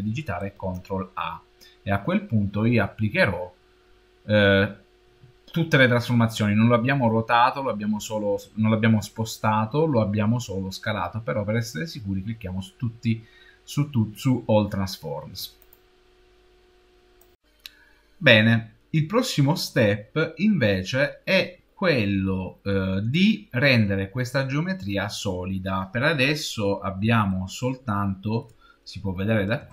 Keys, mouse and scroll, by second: 0.2 ctrl+a, 27.2 shift+middle click, 28.9-29.7 scroll up 5.